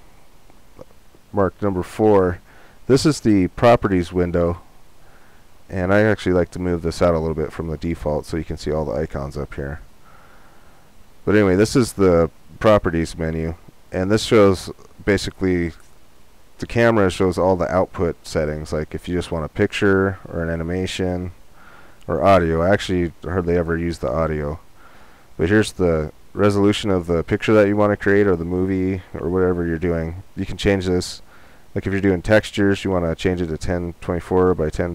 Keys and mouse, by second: 6.5-8.2 drag, 31.5-33.2 drag, 33.3 click.